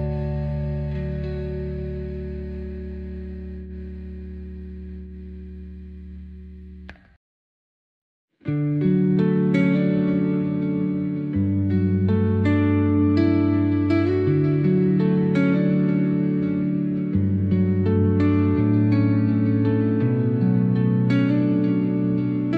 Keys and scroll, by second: 0.5 ctrl+z, 2.3 ctrl+k, 5.3 Delete, 7.3 ctrl+z, 9.9 Delete, 15.7 space, 18.8 space.